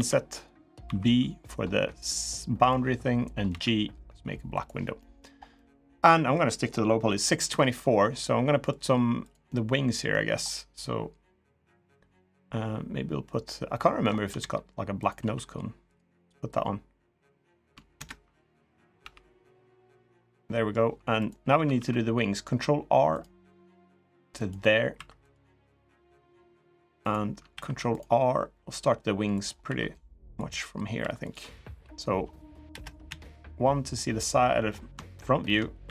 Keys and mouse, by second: 3.2 g, 4.7 middle click, 5.3 middle click, 5.9 middle click, 7.3 shift+middle click, 8.0 middle click, 9.0 click, 9.2 middle click, 12.1 middle click, 13.5 middle click, 14.1 e, 15.0 s, 16.3 click, 17.7 ctrl+KP_Add, 18.7 g, 20.2 middle click, 21.5 ctrl+r, 24.7 3, 25.0 click, 25.5 click, 27.3 ctrl+r, 29.4 2, 30.2 click, 30.7 3, 31.0 click, 32.5 KP_0, 32.8 KP_1, 35.0 shift+middle click, 35.6 e.